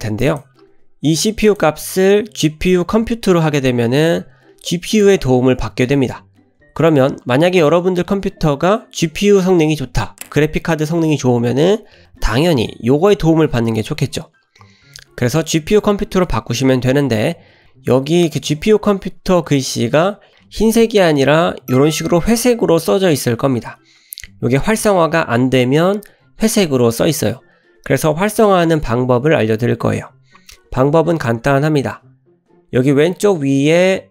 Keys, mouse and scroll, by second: 1.5-5.3 drag.